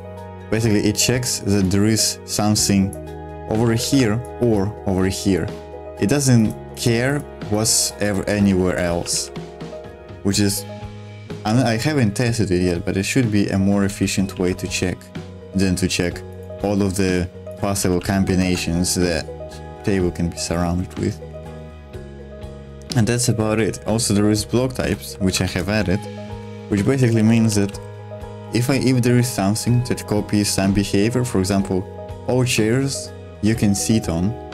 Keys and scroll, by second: 0.5 super+2, 3.6 ctrl+z, 3.7 ctrl+z, 8.4 ctrl+z, 8.5 ctrl+z, 8.7 ctrl+z, 9.0 ctrl+z, 9.2 ctrl+z, 13.9 ctrl+z, 14.3 ctrl+z, 17.8 ctrl+z, 17.9 ctrl+z, 18.4 ctrl+z, 19.6 super+1, 20.7-25.1 typing, 26.2 shift+v, 26.9 Escape.